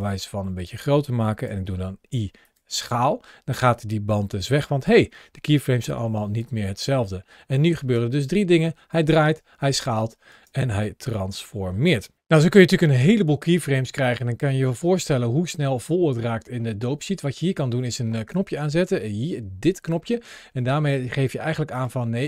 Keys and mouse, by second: 4.1 ctrl+shift+a, 6.2-6.7 drag, 7.6 space, 10.2 space, 11.0-11.7 drag, 14.7 middle click, 18.0 ctrl+shift+a.